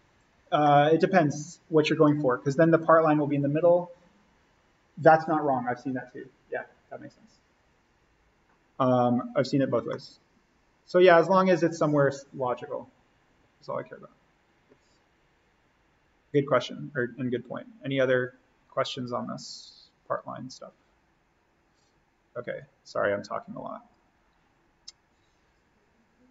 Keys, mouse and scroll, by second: 0.6-2.0 middle drag, 2.0-3.6 scroll up 1, 9.8-14.2 middle drag, 22.5-26.3 drag.